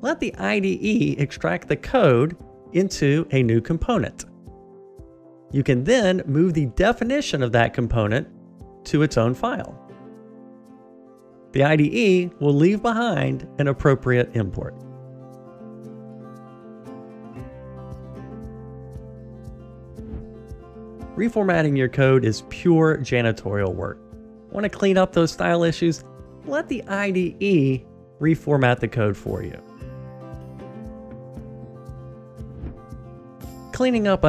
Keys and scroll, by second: 10.0 F6, 28.8 alt+super+l.